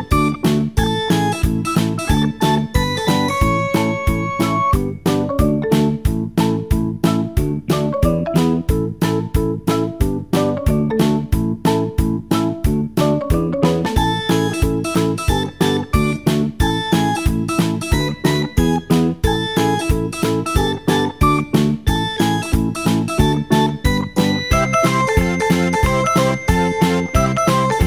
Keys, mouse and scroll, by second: 0.8-3.7 drag, 6.2-9.9 drag, 10.6 click, 12.1 g, 17.0 r, 19.6 g, 22.1 r, 23.9-26.8 drag.